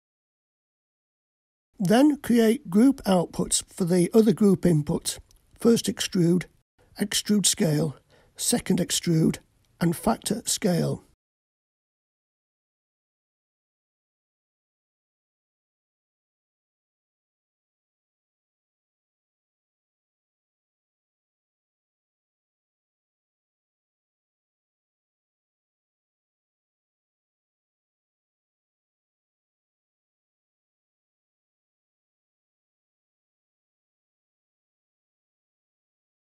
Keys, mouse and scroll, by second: 2.4-2.9 scroll down 1, 2.9-3.9 middle drag, 7.2 click, 9.2-12.4 drag, 18.5-21.6 drag, 25.4 click, 26.1-28.6 drag.